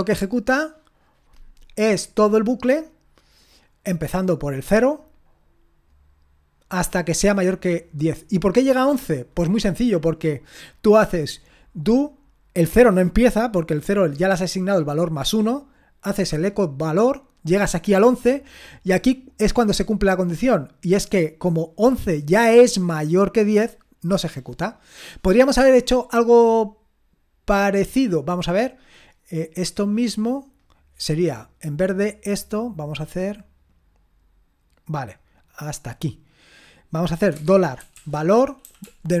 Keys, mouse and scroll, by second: 26.6-28.3 drag, 29.4-31.9 drag, 32.4-37.5 drag, 37.1-39.2 typing.